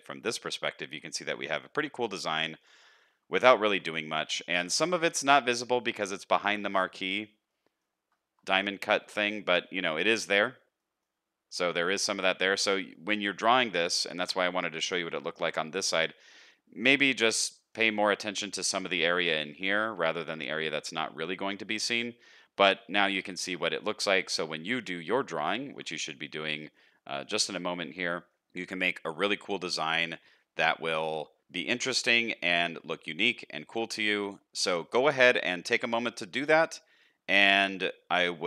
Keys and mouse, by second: 2.4 shift+middle click, 2.8 middle click, 3.6 shift+middle click, 3.9 middle click, 5.5 middle click, 6.4-7.2 middle drag, 7.5-7.9 middle drag, 9.0 shift+middle drag, 10.9 middle click, 11.9 middle click, 12.7 middle click, 14.0 shift+middle click, 14.4 middle click, 15.4 shift+middle click, 16.3 middle click, 17.3 shift+middle click, 17.7 middle click, 20.0 middle click, 22.7 middle click, 24.0 shift+middle click, 24.3 middle click, 25.7 shift+middle click, 26.1 middle click, 26.7 shift+middle click, 26.9 middle click, 28.2 shift+middle click, 29.4 middle click, 31.8 shift+middle click, 32.4 shift+middle drag, 33.2 shift+middle click, 35.0 middle click, 35.5 shift+middle click, 35.8-36.8 middle drag.